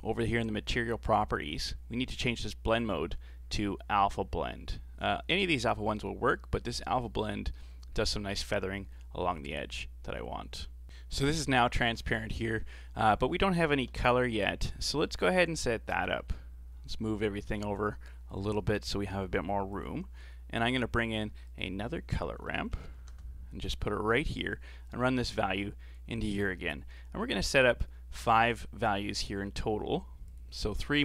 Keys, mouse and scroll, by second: 1.1 click, 2.7-5.7 drag, 7.9-10.1 scroll up 4, 10.3-10.7 scroll down 4, 10.8-11.5 middle drag, 11.5 a, 11.8 a, 12.1-12.5 middle drag, 12.5-13.0 scroll up 4, 13.0 right click, 13.9 KP_7, 15.1 middle click, 15.9 click, 17.1-17.8 scroll down 7, 17.8 click, 19.0 g, 20.8-21.3 scroll up 7, 21.3 shift+a, 23.0 r, 24.9 click, 26.5-27.3 scroll up 4, 27.3-30.3 scroll up 3, 30.3-31.0 drag.